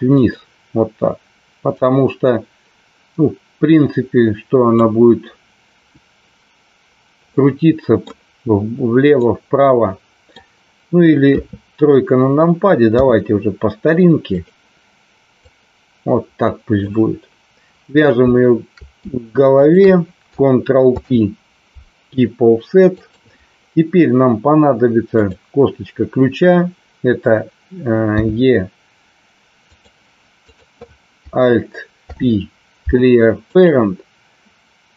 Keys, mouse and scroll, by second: 0.1 click, 1.7-4.7 drag, 7.3 middle click, 9.2-10.3 middle drag, 11.2 KP_3, 12.9 r, 15.3-16.8 drag, 19.6 shift+click, 21.0 ctrl+p, 28.1 e, 29.7 click, 30.3 click, 32.1 alt+p.